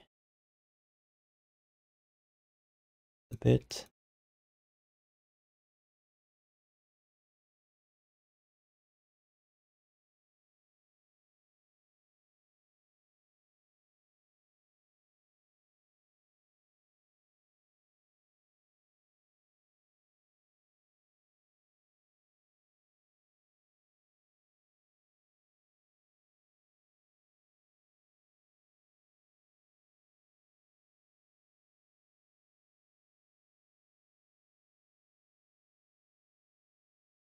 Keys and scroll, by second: 0.8 q, 1.4 w, 3.5 q, 4.0 w, 6.2 q, 6.6 w, 8.5 q, 10.1-11.1 typing, 13.3-15.7 typing, 16.8-17.7 typing, 18.8 1, 24.4 q, 26.3 w, 28.4 q, 30.3 w, 34.2 q, 34.8 w, 37.1 3.